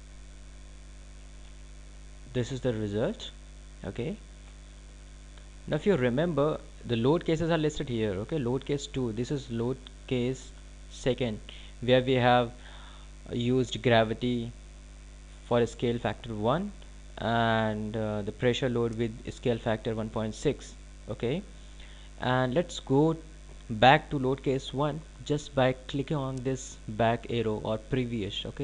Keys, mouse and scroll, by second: 1.3 scroll up 1, 1.7-2.1 scroll down 1, 2.5 alt+click.